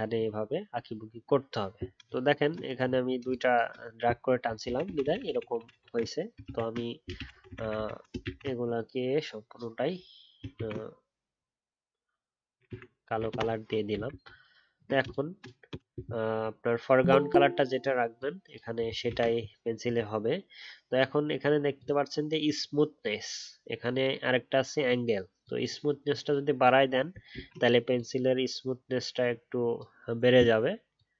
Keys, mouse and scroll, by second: 0.1 alt+scroll down 1, 0.8-3.0 alt+scroll up 1, 4.8 ctrl+z, 5.0 ctrl+z, 5.1 ctrl+z, 5.3 ctrl+z, 5.5 ctrl+z, 5.7 ctrl+z, 6.4 ctrl+z, 7.1 ctrl+shift+z, 7.3 ctrl+shift+z, 10.5 ctrl+e, 13.3 alt+BackSpace, 14.2-14.6 alt+scroll down 1, 14.2 BackSpace, 27.3 ctrl+z.